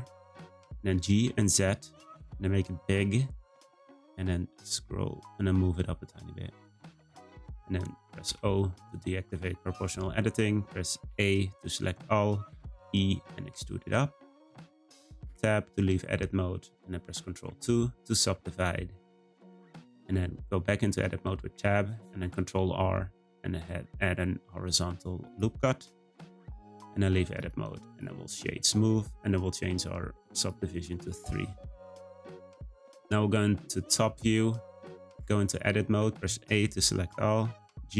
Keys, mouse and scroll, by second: 0.8 g, 8.2 o, 8.9-11.0 scroll up 1, 11.0 a, 12.5 e, 15.2 Tab, 17.5 ctrl+2, 18.3 Tab, 19.0 Tab, 19.9 Tab, 20.3-20.8 scroll up 1, 20.8 middle click, 21.3 scroll up 1, 22.1 r, 26.2 Tab, 26.7 middle click, 27.4-28.5 right drag, 28.5-29.2 scroll down 1, 29.2-30.3 scroll down 1, 30.3-31.5 drag, 31.5 scroll down 2, 35.2 Tab, 35.9 a, 37.5 g.